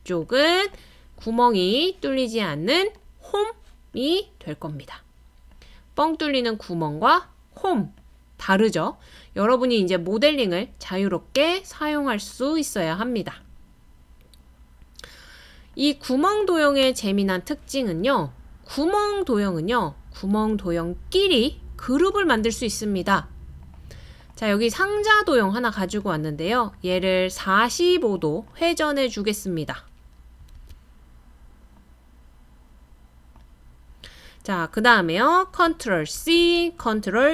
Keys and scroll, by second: 30.6 super+z, 36.2 super+c.